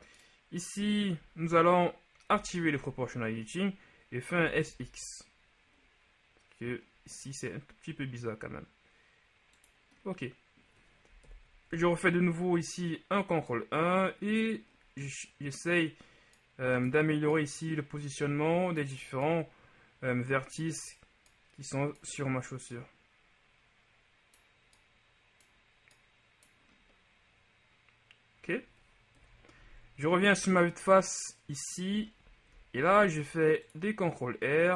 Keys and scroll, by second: 2.4 ▯, 4.5 s, 4.8 x, 11.4 ctrl+KP_1, 29.3 KP_1, 33.0 ctrl+shift+r.